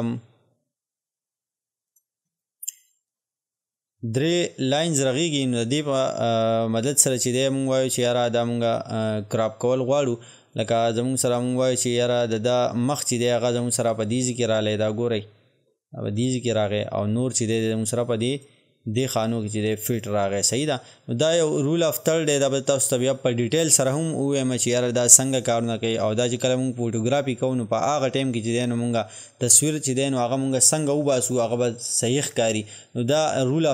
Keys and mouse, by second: 1.9-6.7 drag, 9.4-13.3 drag, 14.5-33.7 drag.